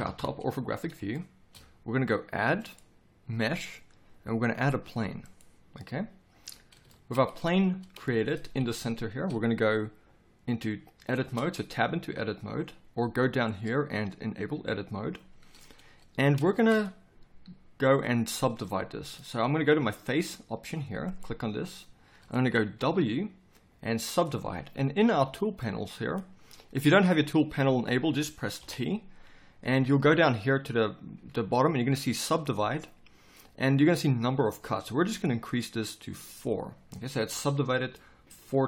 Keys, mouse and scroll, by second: 0.0 KP_5, 28.6 t.